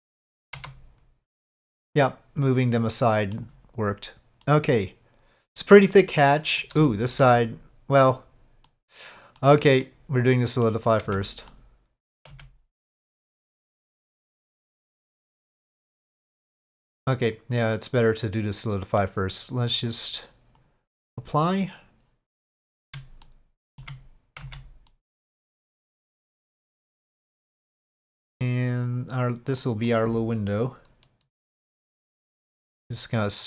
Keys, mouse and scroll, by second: 0.6 Tab, 1.3-2.4 drag, 2.4-3.3 middle drag, 4.4-6.6 middle drag, 6.9 shift+middle drag, 8.7 middle drag, 9.4-9.8 middle drag, 10.3-10.6 middle drag, 11.1 Tab, 11.5 middle click, 12.3 Tab, 12.3-13.4 drag, 14.2 click, 15.1-19.0 middle drag, 20.6-21.2 drag, 22.3 middle click, 22.8 Tab, 23.2 middle click, 24.4 Tab, 24.9 middle click, 25.9-26.4 middle drag, 28.0-28.4 middle drag, 28.8 click, 29.6 middle click, 31.3 right click.